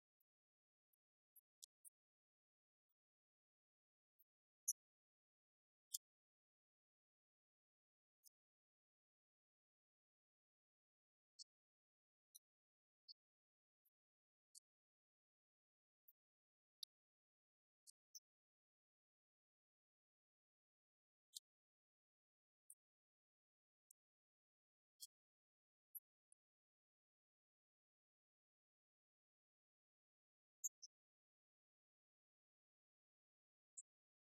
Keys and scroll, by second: 1.6 Right, 4.4 Left, 5.9 Left, 6.2 Right, 7.2 Left, 7.4 alt+Down, 9.8 Down, 11.0 Up, 11.6 Down, 18.8 Up, 19.7 Return, 20.5 shift+Down, 21.6 ctrl+d, 26.3 Left, 26.8 Right, 29.7 Left.